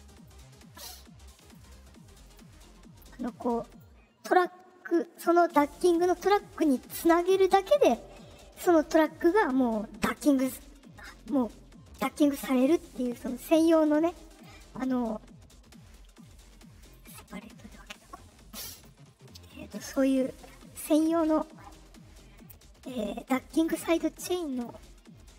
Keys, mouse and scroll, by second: 0.1 right click, 1.3 click, 2.2 click, 3.6 click, 6.5 click, 7.3 click, 14.3 right click, 16.7 click, 18.7 click, 22.3 click, 22.8 click, 23.6 click, 24.5 click.